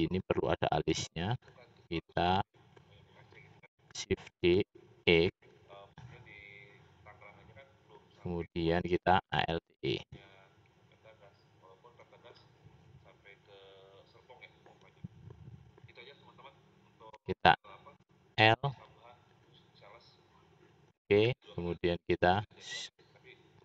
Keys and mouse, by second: 0.7 click, 1.7-2.7 shift+middle drag, 4.2 shift+d, 8.1 middle click, 9.5 alt+e, 18.0 l.